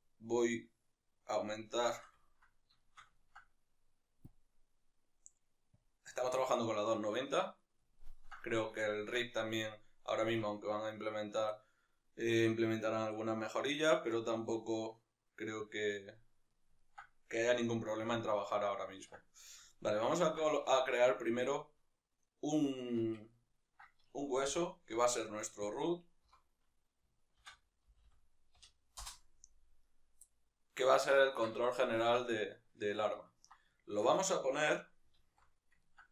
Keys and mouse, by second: 0.5-1.7 drag, 1.7-5.8 shift+middle drag, 5.8 click, 8.0-10.9 ctrl+middle drag, 10.4 Tab, 10.9-15.7 right drag, 15.7-16.5 drag, 16.5-25.8 ctrl+middle drag, 18.1 alt+q, 24.5 g, 25.8 click, 29.0 o, 29.9-30.3 right drag, 30.3-36.1 middle drag, 35.4 alt+q.